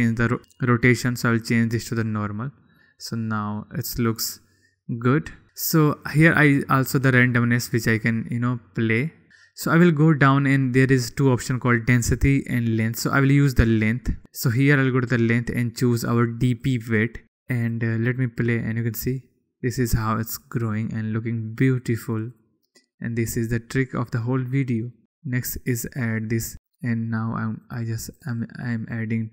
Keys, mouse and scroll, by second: 1.5-2.6 drag, 3.3-5.4 middle drag, 6.6-7.7 middle drag, 7.7 click, 9.3-14.0 middle drag, 14.5-15.7 middle drag, 15.7-17.2 drag, 18.2 click, 18.7 click, 22.3 click, 22.9 click, 24.6-25.0 drag, 26.6 click, 28.2 click.